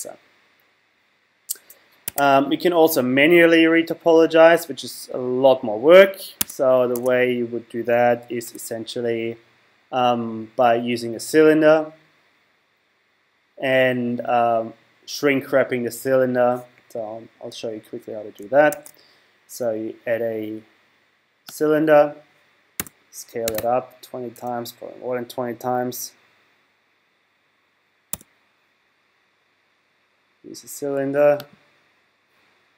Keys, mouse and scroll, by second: 2.0 Tab, 6.4 Tab, 6.9 Tab, 8.4 z, 18.7 shift+a, 22.8 s, 28.1 s, 31.5 click.